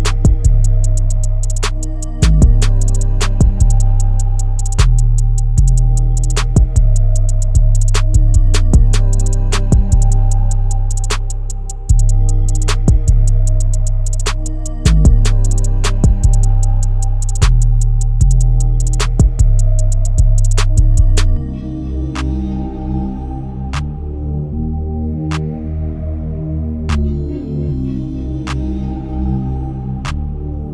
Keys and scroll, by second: 13.7 ctrl+t, 18.7 Return, 19.7 Right, 20.3 Right, 20.7 Right, 21.2 Right.